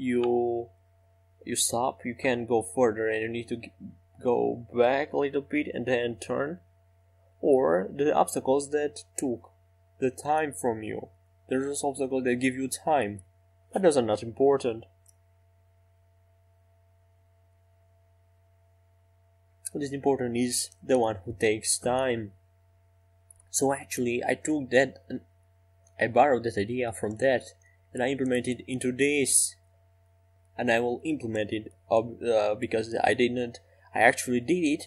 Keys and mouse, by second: 1.1-6.5 right drag, 3.9-6.5 drag, 15.8 r, 22.6 r, 31.7 KP_5, 31.8 KP_7.